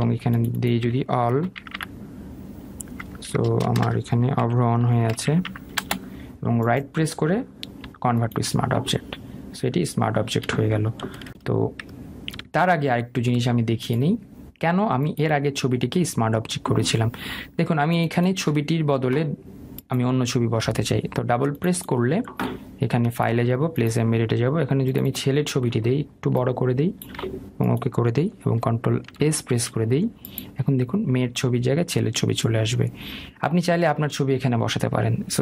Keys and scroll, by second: 0.1 ctrl+g, 4.2 BackSpace, 6.6 Return, 13.4 ctrl+z, 30.1 ctrl+s.